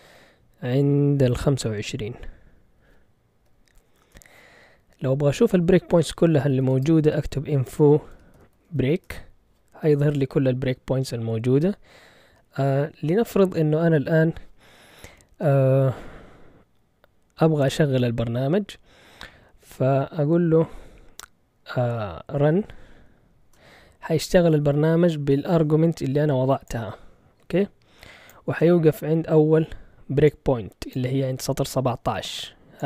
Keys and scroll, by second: 2.8-3.4 typing, 4.0 Return, 6.1-9.3 typing, 22.2-23.4 typing.